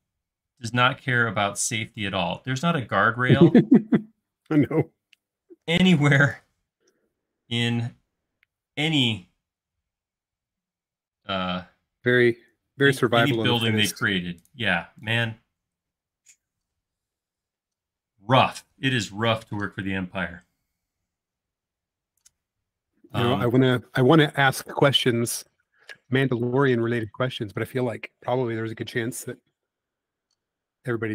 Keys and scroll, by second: 5.5 m, 6.8 Up, 9.7 Left, 10.3 Right, 11.1 Left, 12.9 space.